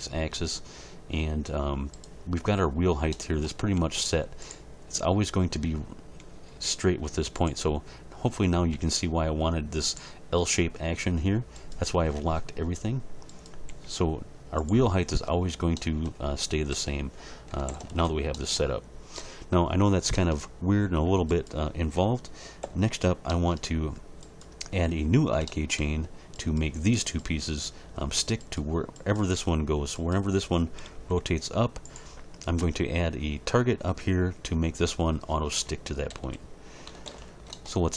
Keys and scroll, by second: 3.7 g, 6.5 g, 8.7 g, 13.7 g, 16.7 a, 17.5 alt+r, 17.7 alt+g, 17.9 alt+s, 22.6 h, 24.7 h, 30.9 g, 36.1 a, 36.9 alt+r, 37.1 alt+g, 37.3 alt+s.